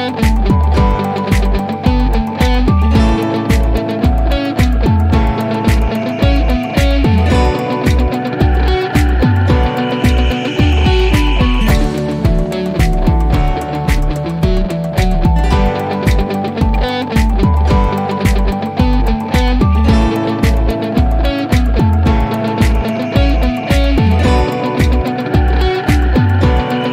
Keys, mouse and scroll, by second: 3.4 click, 8.7 click, 14.9-16.2 drag.